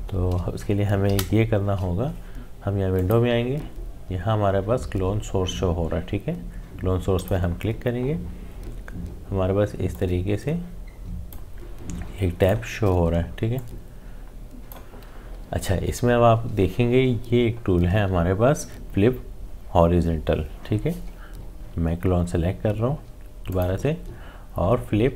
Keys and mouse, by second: 1.0 z, 2.9 click, 7.1 click, 9.9-17.0 drag, 22.7 click.